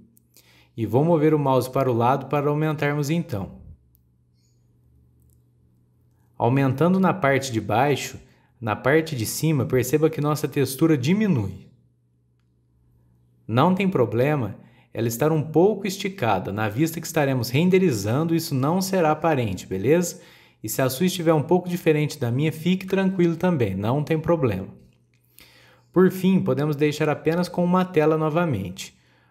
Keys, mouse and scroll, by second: 3.9-4.3 scroll up 2, 4.3-5.4 middle drag, 5.4 scroll down 1, 5.7-7.2 shift+middle drag, 7.2-7.7 scroll down 1, 7.7 click, 8.8 a, 9.1 s, 15.0 middle click, 15.4 scroll up 3, 15.8 middle click, 16.6 scroll down 1, 16.7-19.6 middle drag, 19.6 scroll up 1, 19.8 middle click, 20.4-20.9 scroll down 1, 20.9-24.1 shift+middle drag, 26.2 a, 27.0 click.